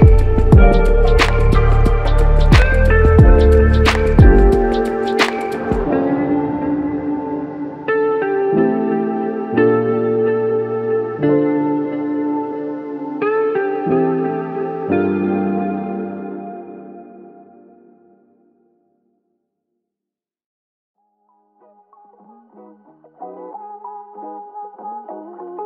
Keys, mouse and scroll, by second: 7.4 f, 8.3 double click, 13.1 double click, 14.0 alt+click, 16.8 ctrl+click, 17.9 ctrl+click, 24.5 ctrl+click.